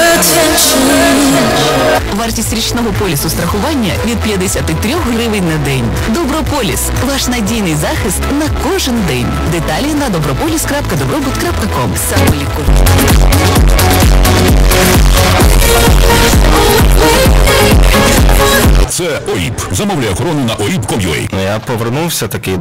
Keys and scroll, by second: 2.1 Page_Down, 19.1 Page_Down.